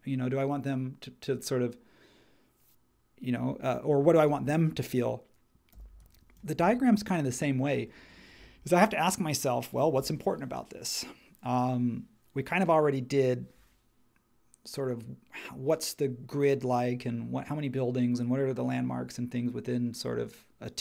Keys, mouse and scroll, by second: 5.7 h.